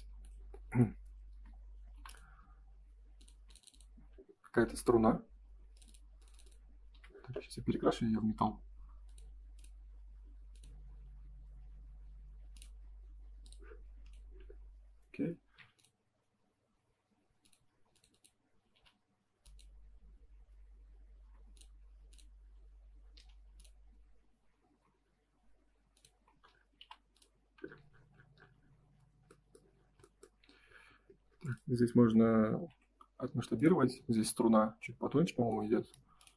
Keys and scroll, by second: 1.0 Escape, 1.3 space, 1.9 p, 3.3 space, 4.6 g, 6.9 b, 14.4 space, 17.6 space, 18.7 m, 20.7 Escape, 21.2 space, 23.1 m, 26.8 p, 30.2 Escape, 30.9 space, 32.6 s, 35.8 space.